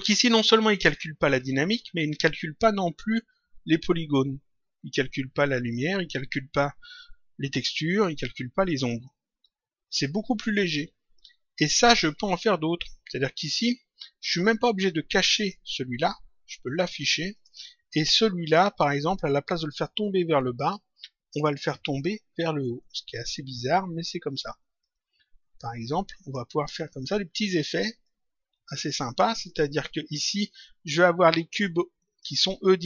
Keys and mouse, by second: 0.7 click, 2.1 click, 11.6 click, 15.3 click, 16.5 click, 18.4 click, 21.3 click, 22.8 click, 24.8 shift+click, 27.0 click, 28.0 click, 29.5 click, 31.6 click, 32.7 click.